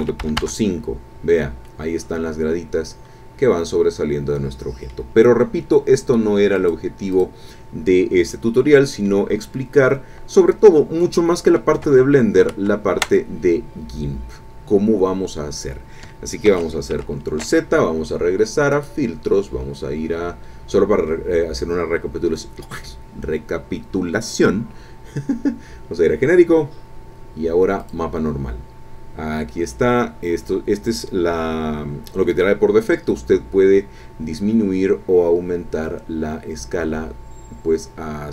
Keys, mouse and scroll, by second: 0.0 KP_Decimal, 0.2 KP_5, 0.4 KP_Enter, 1.7-5.1 drag, 6.5 click, 7.1 click, 7.9-8.2 scroll down 2, 8.3 click, 9.5-9.9 scroll up 2, 9.9 scroll down 2, 11.0 click, 11.9 alt+Tab, 13.0 alt+Tab, 16.5 ctrl+z, 18.7 click, 27.8 click, 34.8-35.5 scroll up 2, 36.3-36.9 scroll up 2, 37.1-37.6 scroll up 2, 37.8-38.3 scroll up 4.